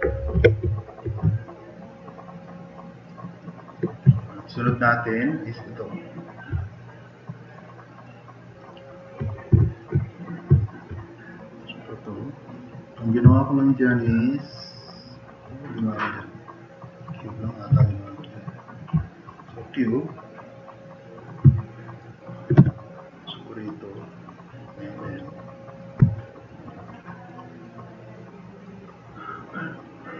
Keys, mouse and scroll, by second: 6.7 drag, 7.1-7.4 drag, 7.8 click, 8.5 click, 8.8 drag, 9.5 click, 10.6 click, 11.3-12.1 drag, 12.9 click, 13.3 click, 13.7 click, 17.7 t, 17.9-18.3 drag, 18.5-21.3 drag, 21.8 click, 22.1 drag, 22.6 e, 23.2-23.7 drag, 24.3-25.9 drag, 26.1-26.5 drag, 26.6 click, 27.0 click, 27.4-28.6 drag, 29.3-30.1 drag.